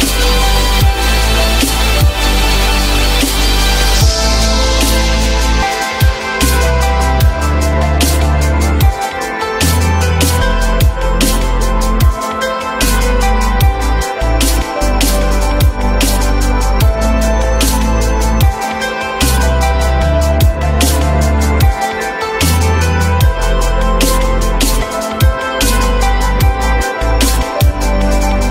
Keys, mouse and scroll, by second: 0.3 ctrl+click, 1.9 alt+middle click, 2.8 alt+middle click, 3.8 alt+middle click, 4.7 alt+middle click, 6.8 ctrl+click, 7.3 ctrl+double click, 8.1 Delete, 9.3 alt+middle click, 11.5 alt+middle click, 12.0 alt+middle click, 23.6 alt+middle click, 24.9 alt+middle click, 26.2 alt+middle click, 27.5 alt+middle click.